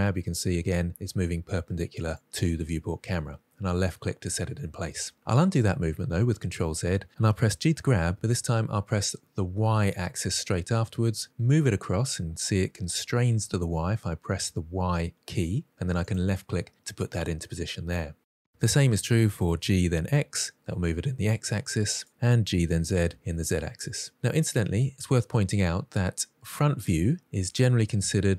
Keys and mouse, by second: 5.2 ctrl+z, 5.9 ctrl+z, 7.6 g, 9.5 y, 16.0 click, 16.6-17.4 middle drag, 19.5 g, 20.0 x, 22.5 g, 22.7 z, 27.1-28.3 middle drag.